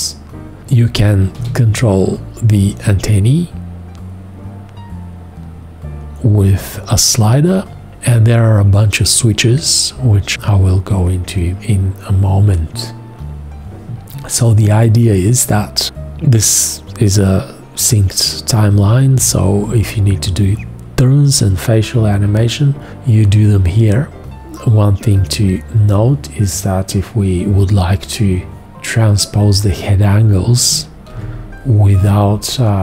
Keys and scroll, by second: 1.4 g, 31.1 shift+x.